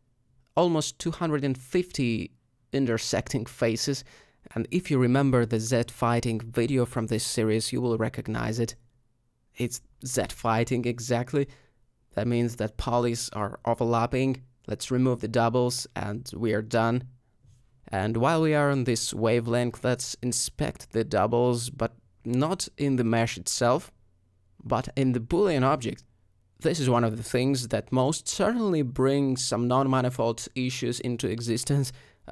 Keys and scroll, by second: 3.2 Tab, 5.7 alt+a, 6.4 g, 11.5 a, 12.5 alt+m, 17.8 Tab, 18.5 ;, 26.7 alt+g, 27.4 alt+z, 29.3 g, 29.5 y, 31.5 g, 31.6 y.